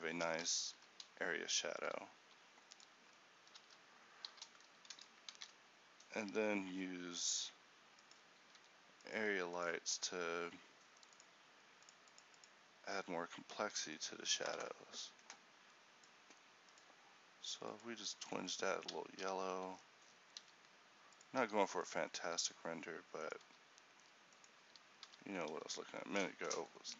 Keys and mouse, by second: 0.0 Escape, 2.3 r, 4.4 h, 8.7 r, 9.3 g, 12.5-19.1 drag, 20.5-22.7 middle drag, 20.5 r, 21.5 g, 23.5 r, 25.2 h.